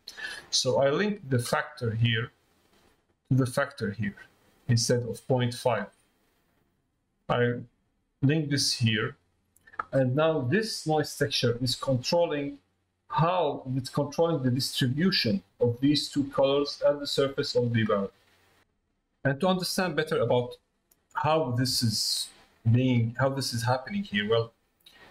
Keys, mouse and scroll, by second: 2.1-8.6 drag, 10.6 click, 16.7 middle click, 18.0 middle click.